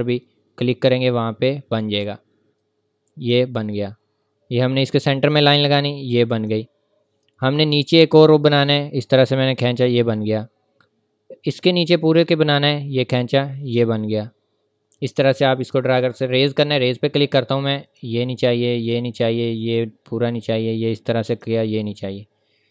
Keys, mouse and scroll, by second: 12.1 click, 16.3 click.